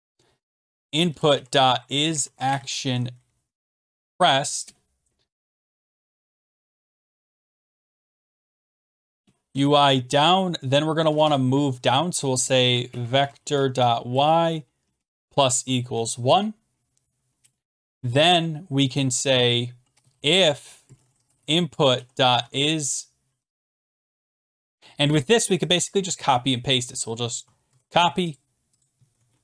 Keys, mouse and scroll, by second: 0.0-3.1 typing, 0.6 Down, 0.7 Return, 4.0 Down, 4.1 Down, 4.6 Return, 5.6 Down, 5.7-6.6 Down, 6.9-8.8 typing, 9.0 Down, 9.1 Down, 9.2 Return, 9.5 Right, 10.8-15.6 typing, 17.4 Return, 17.9 BackSpace, 19.7-24.5 typing, 26.8 click, 27.7 ctrl+c, 28.4 click, 28.8 click, 29.2 Return.